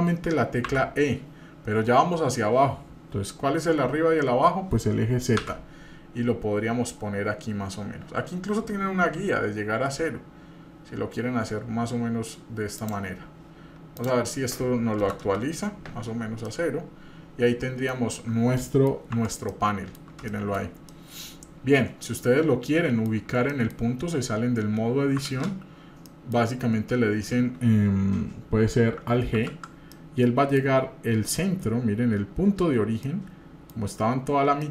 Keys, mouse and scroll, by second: 0.7 e, 13.9-15.8 drag, 16.5-17.9 middle drag, 18.5 middle click, 19.1 Tab, 19.5-20.0 middle drag, 20.3 shift+middle drag, 20.6 scroll down 1, 20.9-22.2 middle drag, 22.7 middle click, 23.5 middle drag, 25.3 ctrl+space.